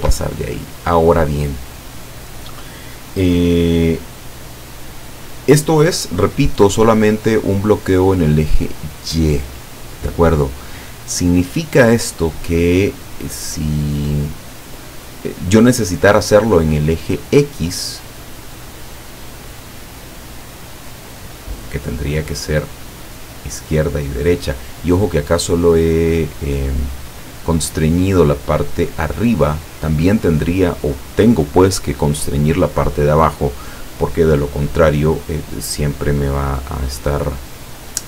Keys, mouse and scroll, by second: 0.0 Escape, 9.8-11.1 drag, 17.8-19.0 drag, 19.8-21.8 drag.